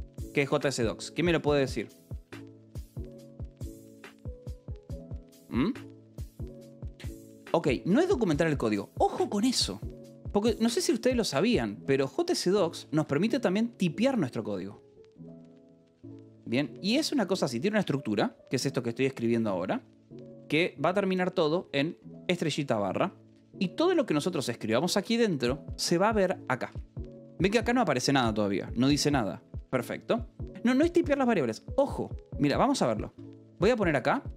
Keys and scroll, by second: 2.1-4.7 typing, 10.3 l, 10.9 a, 11.2 BackSpace, 11.7 /, 13.0 space, 16.5 Return, 17.7 Return, 21.6 BackSpace, 21.8 /, 22.3 Escape, 22.6 k, 23.8 j, 24.1 k, 24.6 k, 24.9 j, 27.1 shift+k, 29.4 Escape, 29.8 k, 32.7-33.6 typing.